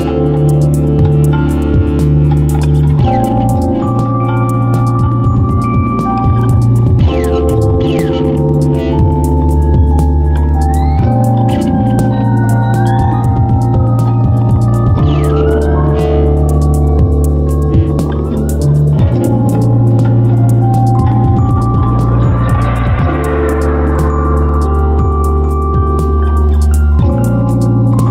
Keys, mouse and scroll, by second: 10.5 KP_7, 26.8 m.